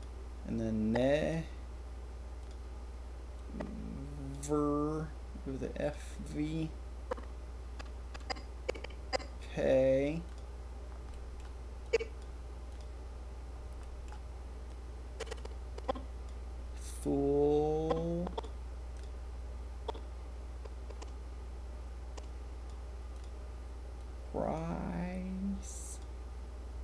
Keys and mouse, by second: 7.0-9.4 drag, 10.2 click, 11.1 click, 11.8-13.8 drag, 14.6-16.2 drag, 17.8 click, 19.8-22.6 drag, 23.9 click, 25.8 click.